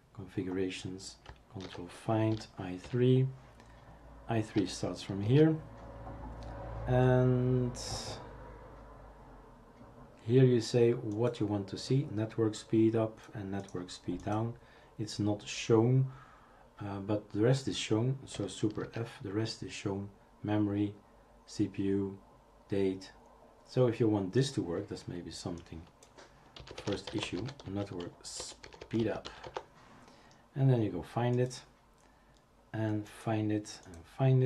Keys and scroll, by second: 1.6 ctrl+f, 5.3 super+f, 18.9 super+f, 26.3-27.3 typing, 28.6-29.9 typing.